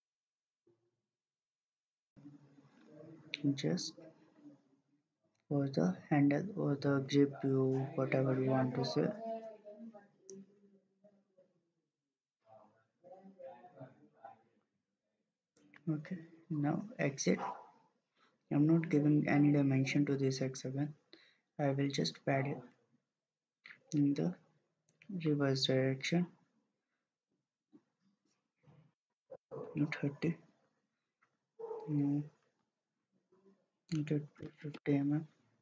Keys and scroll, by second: 30.6-31.5 typing.